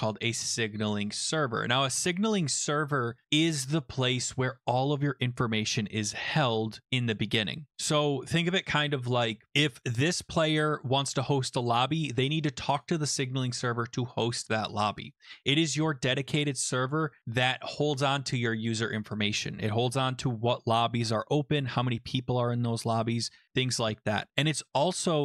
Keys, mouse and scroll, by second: 5.4-7.3 scroll down 5, 10.6 click, 12.8 click.